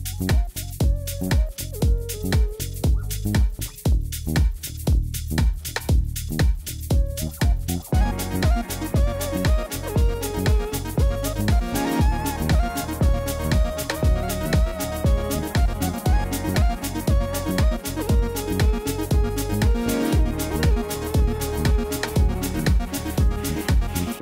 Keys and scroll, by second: 1.7 s, 3.8 alt+a, 5.8 Return, 5.8 g, 6.2 z, 8.0 alt+a, 8.1 c, 8.7 Return, 8.7 s, 13.2 alt+a, 14.6 c, 15.6 Return, 16.1 g, 16.2 z, 19.7 alt+a, 19.9 c, 21.0 Return, 21.5 g, 21.6 z, 23.7 alt+a.